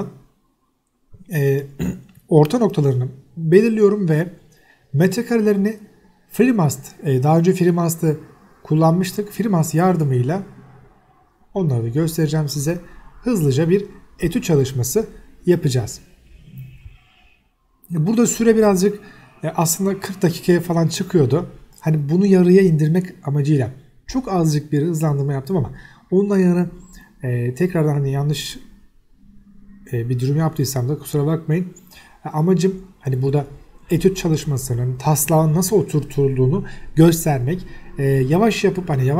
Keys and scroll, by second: 0.9 Escape, 1.1-3.0 typing, 1.7 Escape, 2.6 Escape, 3.8 Escape, 6.0 m, 6.8 Escape, 7.2 m, 7.7 space, 9.7 t, 12.6 Escape, 12.8 o, 12.9 space, 13.8 Escape, 14.1 s, 16.6 Escape, 22.3 Escape, 23.8 m, 26.0 1, 26.7 Escape, 27.2 s, 27.3 space, 28.2 Escape, 34.5 m, 34.6 space, 35.7 1, 36.2 BackSpace, 36.5 1, 37.3 Return.